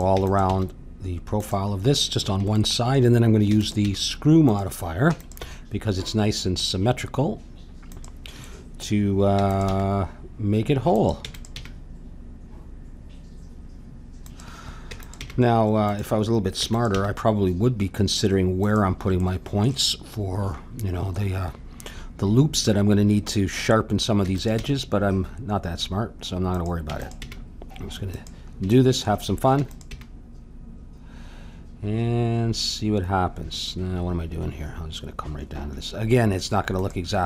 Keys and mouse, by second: 0.1 e, 0.5 g, 3.5 e, 3.8 g, 5.1 e, 5.4 g, 9.3 e, 9.6 g, 11.2 e, 11.6 g, 14.9 e, 15.1 g, 16.5 e, 16.9 g, 24.2 e, 24.6 g, 26.9 e, 27.2 g, 29.5 e, 29.9 g.